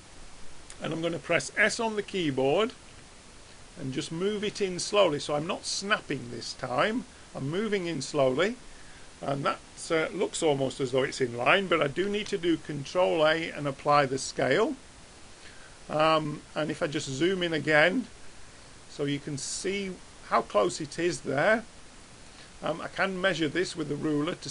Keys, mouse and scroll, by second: 3.0 s, 12.0 ctrl+a, 15.9-23.5 middle drag, 23.5-24.5 drag.